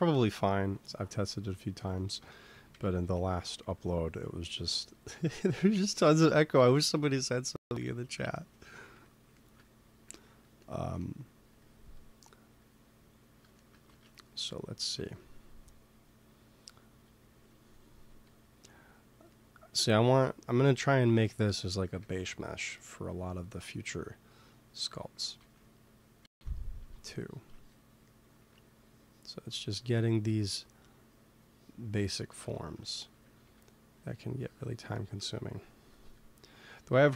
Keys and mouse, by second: 0.0 KP_1, 2.6 f, 3.7-5.6 drag, 5.2 ctrl+s, 6.7 KP_3, 8.8 f, 11.4 f, 11.6-13.5 drag, 13.8 ctrl+z, 14.9 ctrl+s, 18.9-20.9 drag, 20.9 ctrl+z, 21.9 ctrl+s, 23.1-26.1 drag, 25.1 ctrl+z, 25.4 ctrl+z, 26.1 ctrl+s, 27.0 middle click, 28.3 f, 29.1 click, 30.9-32.7 drag, 32.7 middle click, 33.3 f, 34.0-35.6 drag, 35.8 KP_1, 36.9 KP_1.